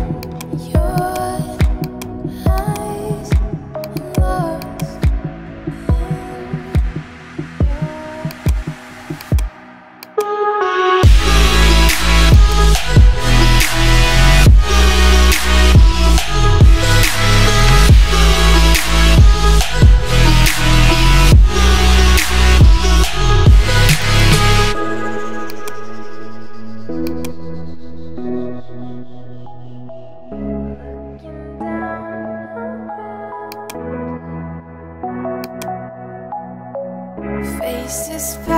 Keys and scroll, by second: 4.5 space, 6.8 ], 10.3 ].